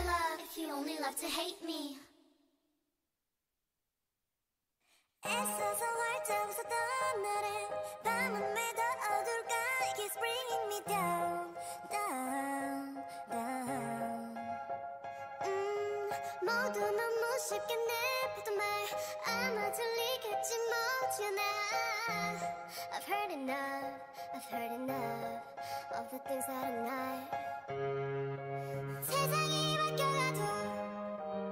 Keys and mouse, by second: 0.1 g, 2.6-4.2 drag, 4.0 a, 4.2 Tab, 6.8 Tab, 7.3 click, 8.3 ctrl+Tab, 10.1 g, 10.9 o, 12.1 g, 13.3 g, 14.4 g, 15.9 a, 17.4 z, 19.2 z, 20.0 z, 20.6 Tab, 21.0 Tab, 23.0-25.7 drag, 25.0-26.6 right drag, 25.9 o, 26.5 g, 28.0 a, 28.2 k, 30.8-31.5 drag, 31.1 x.